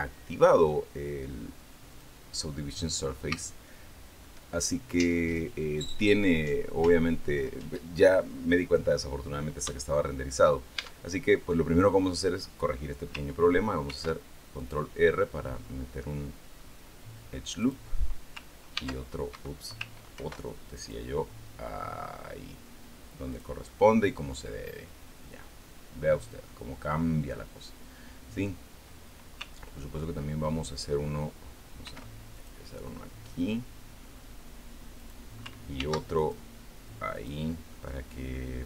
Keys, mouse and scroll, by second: 1.7 click, 2.3-4.2 middle drag, 8.8-9.3 scroll up 2, 9.6 shift+middle click, 10.6 shift+Tab, 13.7 ctrl+r, 14.4 click, 17.4 click, 18.5 ctrl+e, 19.1 ctrl+Escape, 20.0 ctrl+r, 20.6 ctrl+click, 23.1 click, 23.5-28.8 middle drag, 31.6 ctrl+r, 32.2 ctrl+click, 34.8 click, 35.6 ctrl+r, 36.0 ctrl+click, 37.0 click, 37.5-38.6 middle drag.